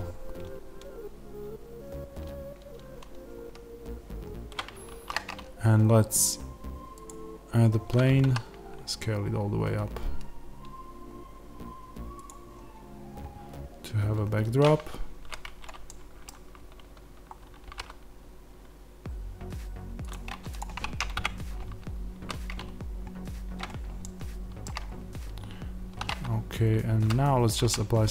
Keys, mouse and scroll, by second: 15.3 z, 15.8-20.0 middle drag, 16.8 z, 17.2-17.6 scroll, 17.6 g, 20.0 click, 21.1 KP_0, 22.2 z, 24.1-28.1 shift+middle drag, 24.8-25.1 scroll up 1, 26.5 z.